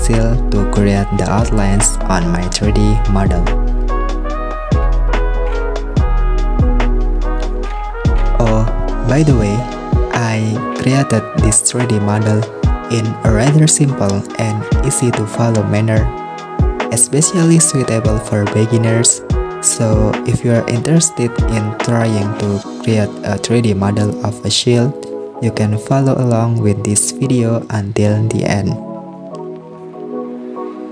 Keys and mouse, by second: 1.9 right click, 2.7 right click, 2.9 super+z, 3.3 super+r, 5.2 super+r, 8.4 click, 11.0 super+r, 13.5 click, 13.8 click, 14.2 shift+click, 14.4 click, 15.1 s, 18.3-19.4 drag, 21.3 super+r, 22.3 shift+middle click, 22.6 s, 24.7 click, 24.9 shift+click, 25.4 s, 26.3 s, 29.0 click.